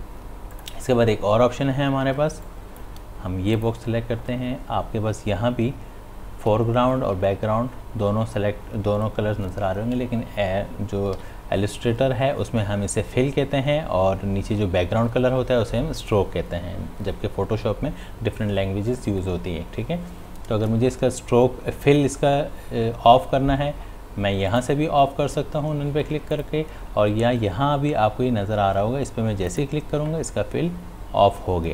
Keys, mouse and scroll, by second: 2.2 space, 2.4 click, 2.8 space, 3.6 click, 11.2 x, 24.5 click, 29.5 click.